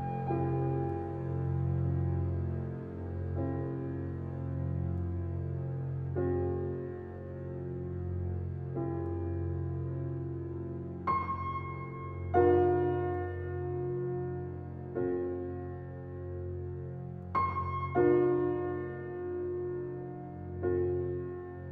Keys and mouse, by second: 0.0-4.6 drag, 5.8 click, 6.1 click, 7.1 click, 7.5 click, 8.4-10.3 drag, 10.6 Return, 11.9 click, 12.8-16.7 drag, 18.1-19.0 drag, 19.2 click.